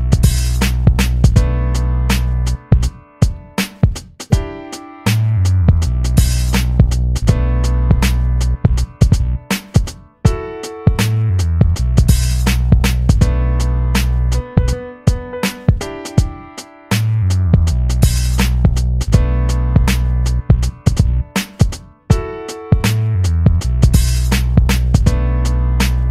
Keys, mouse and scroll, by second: 0.1-1.7 drag, 1.7 space, 1.9 click, 2.2 space, 2.8 alt+scroll up 1, 3.4 space, 3.5 click, 3.9 space, 5.9 click, 6.0-10.9 drag, 10.9 v, 11.2-17.6 drag, 21.7 a, 22.9-24.5 drag, 24.5 v, 25.2 click.